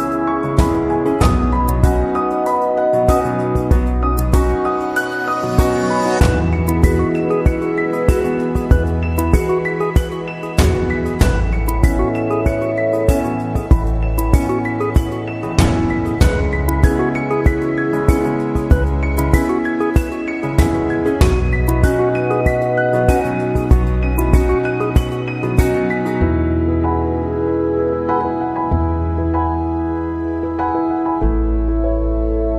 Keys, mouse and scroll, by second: 1.1 click, 2.0 space, 2.1 click, 2.5 space, 3.6 f, 4.0 space, 4.3 click, 4.5 space, 6.4 click, 9.3 click, 13.2 ctrl+t, 14.6 alt+shift+click, 17.5 click, 18.5 click, 18.9 click, 23.1 ctrl+t, 24.8 alt+shift+click, 30.7 space, 30.8 click, 31.2 space, 31.7 click.